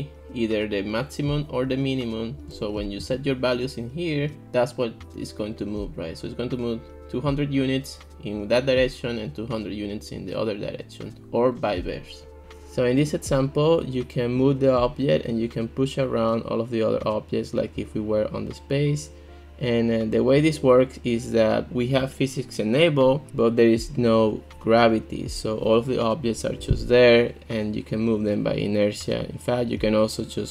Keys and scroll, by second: 3.0 ctrl+x.